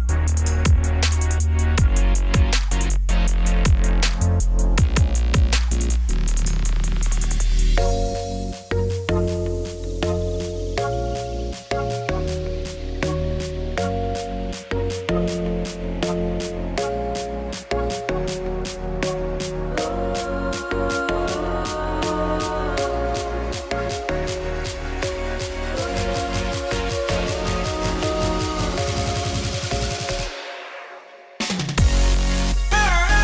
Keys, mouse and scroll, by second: 6.2 shift+d, 6.7 ,, 7.1 ., 7.7 r, 12.3 click, 12.4 click, 12.9 KP_0, 13.4 middle click, 13.6-14.1 scroll down 2, 14.1 g, 14.7 g, 15.8 KP_0, 17.7 scroll down 1, 18.1 click, 19.4 click, 19.9 click, 20.5 ctrl+s, 21.0-21.4 scroll up 2, 21.5 click, 24.2 ctrl+s, 24.5-24.9 scroll down 1, 24.9 click, 25.6-26.8 drag, 26.9 ctrl+s, 27.5 click, 27.7 z, 28.1 middle click, 28.5 scroll up 7, 28.7 shift+middle click, 29.4 click, 29.8 click, 30.3 Tab, 31.0 click, 31.8 shift+s, 31.9 Tab, 32.2 middle click, 32.4 shift+a.